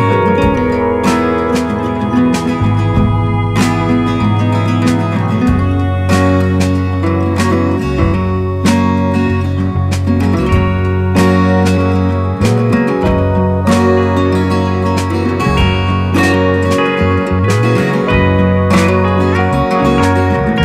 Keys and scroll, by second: 4.3 i, 11.2 b.